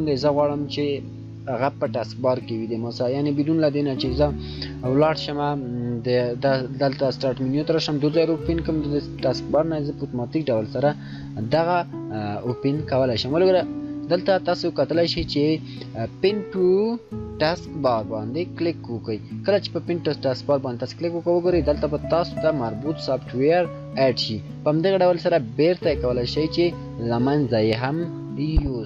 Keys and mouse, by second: 18.2 shift+click, 25.9 shift+right click.